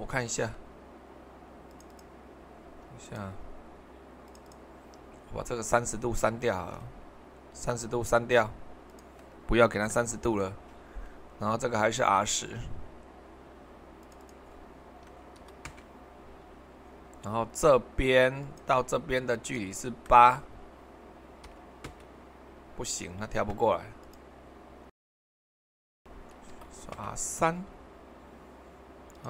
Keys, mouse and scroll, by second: 6.5 ctrl+middle click, 8.9-11.1 drag, 14.0-15.3 drag, 15.3 typing, 15.7 Return, 18.4-21.3 drag, 21.4 typing, 21.8 Return, 26.9 Return, 29.1-29.2 drag.